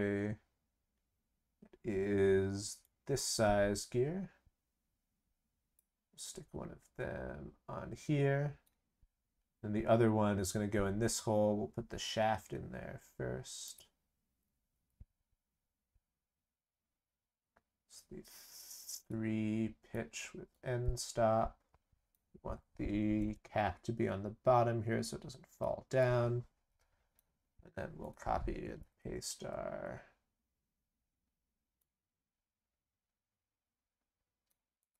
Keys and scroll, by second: 28.8 ctrl+c, 28.9 ctrl+v.